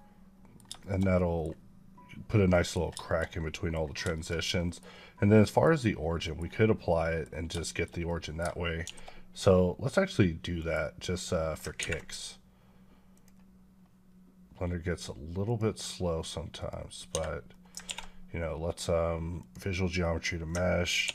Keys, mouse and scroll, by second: 0.6 shift+middle click, 2.3 middle click, 2.7 scroll down 1, 2.9 shift+middle click, 4.0 shift+middle click, 5.2 middle click, 5.8 scroll down 1, 6.0 middle click, 6.9 middle click, 7.5 shift+middle click, 8.7 shift+d, 10.0 right click, 10.9 middle click, 16.6 click, 17.3 middle click, 17.7 ctrl+a, 19.2 click.